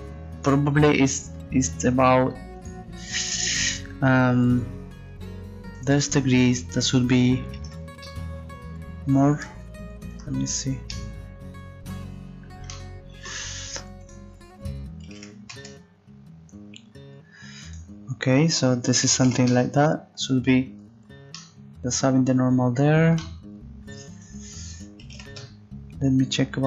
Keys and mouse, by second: 2.6 click, 3.0-9.4 middle drag, 10.2 Tab, 10.9 middle click.